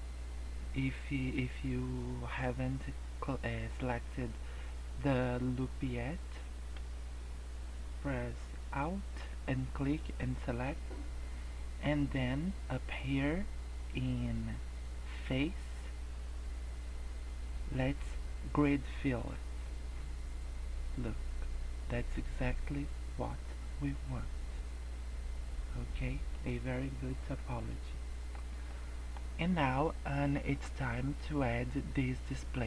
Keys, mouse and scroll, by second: 10.5 middle click, 15.2 click, 19.6 middle click, 26.4 scroll down 4, 26.9-27.4 scroll up 2, 27.4 Tab, 27.6 middle click, 28.4 scroll down 1, 28.6 middle click, 29.1 scroll up 2.